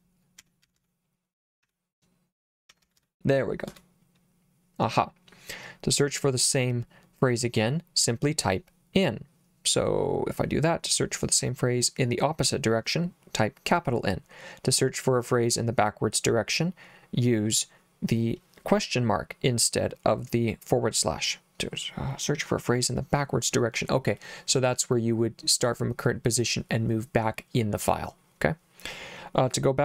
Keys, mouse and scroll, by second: 0.0-3.5 typing, 3.7 Return.